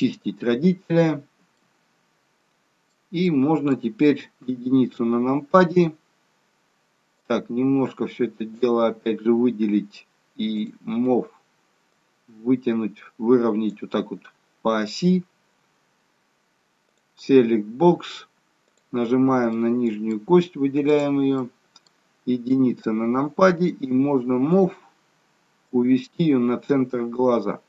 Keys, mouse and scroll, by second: 1.5 middle click, 3.3 middle click, 4.4 KP_1, 7.1 click, 10.5 click, 11.9 click, 16.9 click, 18.6 click, 19.5 middle click, 20.9 click, 21.3 middle click, 22.5 KP_1, 25.5 click, 25.6 click.